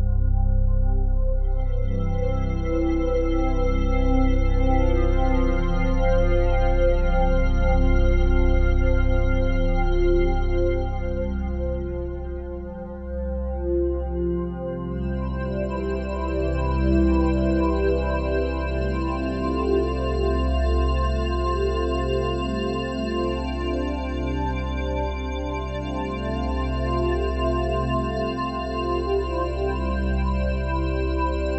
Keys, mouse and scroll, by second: 1.5 typing, 2.6-5.2 drag, 5.3-7.5 drag, 7.5 9, 7.9 Return, 9.0 g, 10.8 click, 16.6-17.2 ctrl+alt+drag, 18.1-18.8 alt+shift+drag, 21.4 ctrl+alt+click, 22.0 typing, 23.6 typing, 24.5-24.9 ctrl+alt+drag, 25.5 typing, 26.2 click, 26.9 typing, 28.1 click, 29.9 typing.